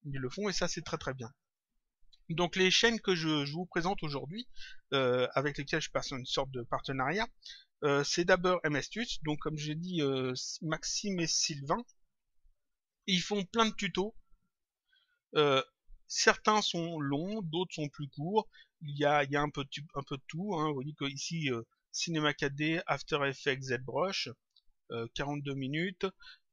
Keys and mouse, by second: 1.3 click.